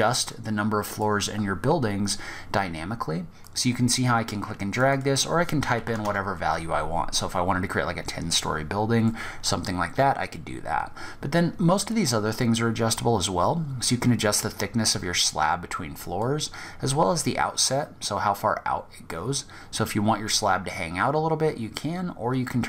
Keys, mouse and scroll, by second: 0.5-1.0 scroll down 3, 1.0 scroll up 1, 2.6 click, 4.1 click, 6.4-6.8 scroll down 4, 6.8 scroll up 1, 7.4 scroll down 1, 7.7-8.3 scroll up 1, 8.3 middle click, 9.4 scroll down 1, 9.7 scroll up 1, 11.5 click, 15.4 click.